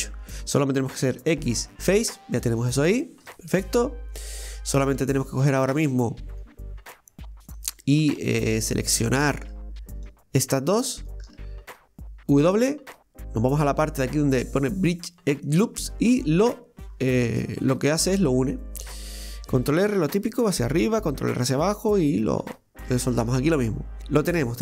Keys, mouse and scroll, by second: 1.2 x, 2.9-3.3 scroll up 1, 3.3 shift+middle click, 3.7 scroll up 1, 5.0 right click, 5.8 right click, 6.3 right click, 7.6-8.6 drag, 8.6 right click, 8.9 alt+shift+right click, 9.1 alt+shift+right click, 9.6 scroll down 1, 10.9 alt+shift+right click, 12.4 w, 16.6-17.2 scroll up 3, 17.2-19.7 middle drag, 19.7 ctrl+r, 22.3 scroll down 2, 22.9-24.6 shift+middle drag.